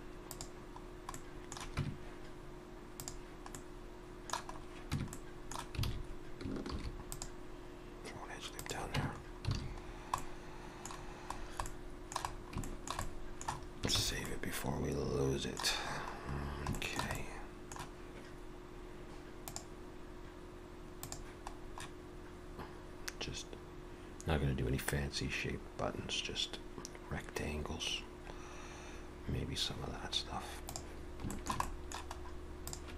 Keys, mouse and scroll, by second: 0.9 scroll down 1, 1.2 middle click, 1.8 Tab, 2.9 click, 3.5 middle click, 4.6 scroll up 1, 5.0 Tab, 5.1 middle click, 5.9 alt+a, 6.7 ctrl+r, 9.0 Tab, 9.2-10.6 scroll down 6, 9.6 alt+a, 10.2 middle click, 11.0-12.3 scroll down 3, 11.7 middle click, 12.3-12.7 scroll down 2, 12.7 shift+middle click, 13.0 middle click, 14.0 ctrl+s, 14.3 middle click, 15.8-16.3 scroll up 3, 16.3-16.7 scroll down 2, 16.8 shift+middle click, 17.2 middle click, 31.3 shift+middle click, 32.1 scroll up 1, 32.7 click, 32.7 scroll up 2.